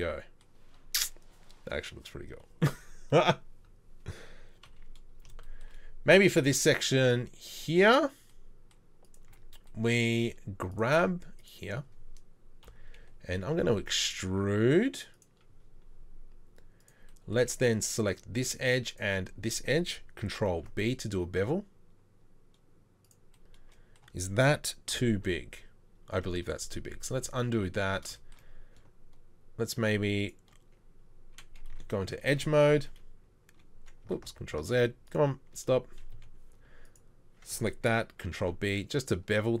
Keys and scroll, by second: 4.7 KP_3, 9.3 Tab, 12.6 KP_3, 13.4 e, 20.5 ctrl+b, 24.9 KP_3, 26.3 ctrl+z, 26.9 ctrl+z, 27.2 ctrl+z, 27.5 ctrl+z, 27.8 ctrl+z, 36.1 2, 38.4 ctrl+b.